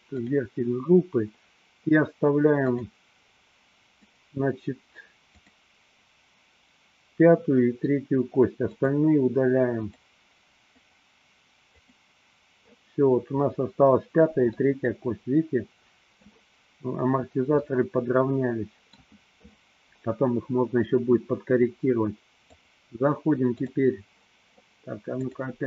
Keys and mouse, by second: 2.8 click, 4.3 click, 5.5 click, 8.8 click, 10.0 click, 11.0 click, 12.0 click, 14.5-16.5 middle drag, 17.8-19.4 middle drag, 22.6-23.9 drag, 25.3-25.6 drag.